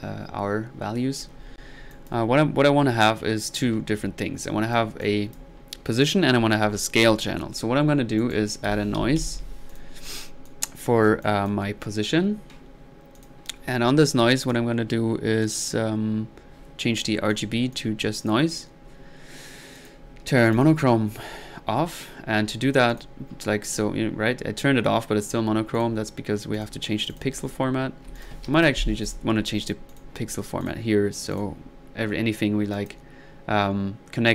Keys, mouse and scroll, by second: 4.4-5.5 drag, 8.2 right click, 8.5-9.7 typing, 9.7 drag, 10.1 click, 10.4 click, 11.2 click, 17.3-17.6 drag, 17.7 click, 18.2 click, 18.8 middle click, 19.8 drag, 20.5 click, 20.8 click, 22.9 click, 23.6 click, 25.8 click, 26.5 drag, 27.1 click, 28.2 ctrl+click, 28.6 ctrl+z, 29.0 ctrl+click, 29.9 ctrl+drag, 30.6-31.2 drag, 31.3 click, 32.7-33.1 drag.